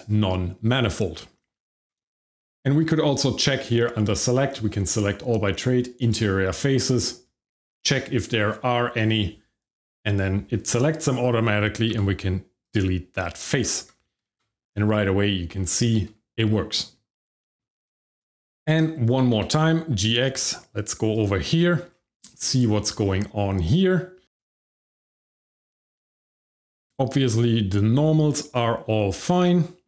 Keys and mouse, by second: 2.2 middle click, 3.5-6.1 drag, 11.9 x, 13.6 Tab, 14.3 shift+z, 15.8 shift+middle click, 16.7 middle click, 17.4 shift+middle click, 17.6 middle click, 18.1 click, 19.2 g, 19.3 x, 21.1 click, 21.5 middle drag, 22.4 shift+middle click, 22.8 middle drag, 24.2 Tab, 24.5 middle click, 24.8 shift+middle click, 25.2 middle click, 26.5-29.8 shift+middle drag.